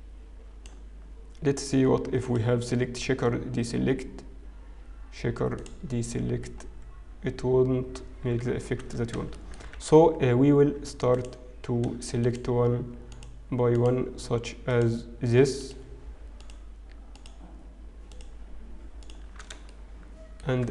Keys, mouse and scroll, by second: 3.3 click, 6.2-7.3 scroll up 2, 7.3-8.1 scroll up 4, 8.1-8.7 scroll down 3, 8.7-9.2 scroll up 1, 9.2 shift+a, 9.6 shift+middle click, 10.0 alt+a, 10.0-10.7 scroll up 1, 11.1 alt+click, 12.2 alt+shift+click, 13.7 alt+click, 15.4 alt+shift+click, 19.2 alt+shift+click, 19.7 shift+middle click, 20.5-20.7 scroll up 3.